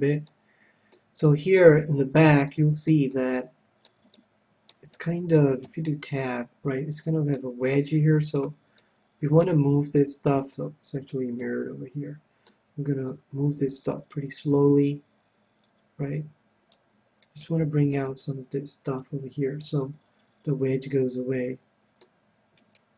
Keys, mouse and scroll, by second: 0.3-7.8 middle drag, 5.7 Tab, 7.2 Tab, 8.1-9.7 right drag, 8.8-10.4 middle drag, 10.5-13.0 middle drag, 13.0-14.7 drag, 14.7-16.5 right drag, 15.7-17.4 drag, 17.4-19.0 right drag, 18.1-19.7 drag, 19.7-21.2 middle drag, 22.6-22.9 right drag.